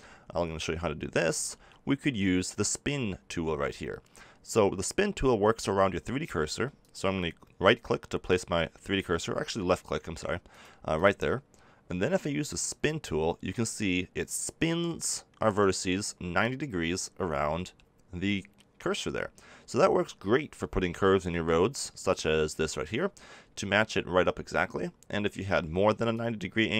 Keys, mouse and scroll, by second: 1.3 ctrl+z, 6.7-8.6 drag, 10.4-14.6 drag, 26.1 click.